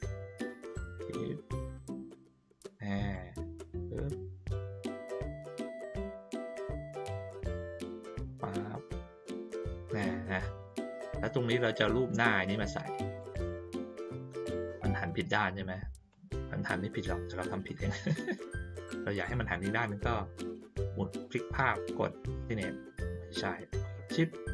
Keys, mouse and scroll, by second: 0.5-2.7 drag, 3.1-6.3 drag, 7.1-9.9 drag, 12.0-13.1 drag, 13.8 click, 16.1-24.5 drag.